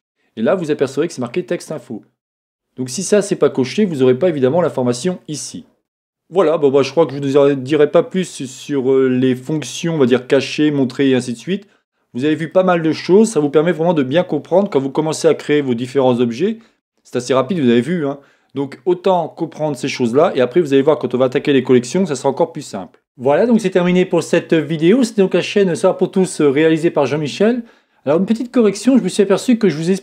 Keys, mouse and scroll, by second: 5.8-30.0 middle drag, 12.0-12.5 scroll down 1.